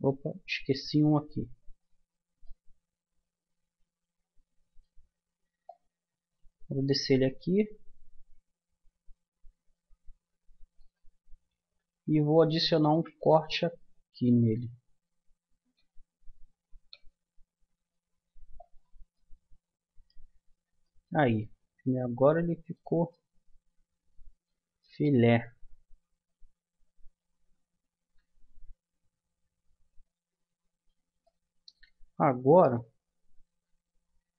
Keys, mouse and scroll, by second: 4.1 click, 5.6-7.4 drag, 12.8 ctrl+r, 19.1-20.8 middle drag, 22.7 middle click, 23.6-26.8 middle drag, 31.2-33.2 middle drag, 33.6 Tab.